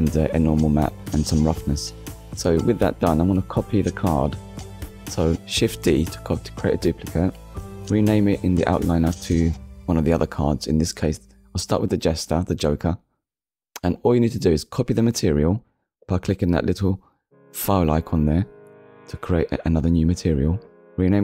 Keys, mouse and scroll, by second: 0.0 shift+d, 0.8 x, 3.2 click, 3.6 middle click, 4.7 click, 5.9 click, 7.0-7.7 typing, 8.1 Return, 10.6 click, 13.9 click, 14.6 click, 15.6 click, 16.6-17.1 typing, 17.7 Return, 18.9-19.6 scroll up 2, 20.2 click.